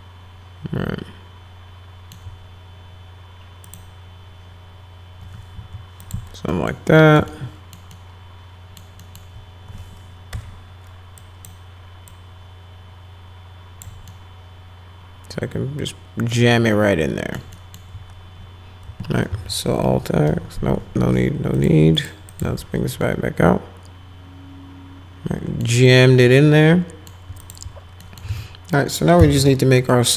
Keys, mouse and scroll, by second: 3.7 click, 5.5 w, 6.0 click, 6.5 middle click, 7.0 middle click, 7.3 alt+middle click, 7.9 alt+middle click, 9.0 alt+middle click, 10.3 1, 11.2 click, 12.1-13.8 drag, 14.1-17.4 alt+middle drag, 17.5 alt+middle click, 19.3 alt+x, 20.3 alt+x, 21.5 click, 22.0 click, 22.3 click, 22.6 alt+x, 23.0-25.6 alt+middle drag, 25.9-27.1 alt+middle drag, 27.4 click, 28.0 alt+middle click, 28.3-29.9 typing, 29.8 middle click.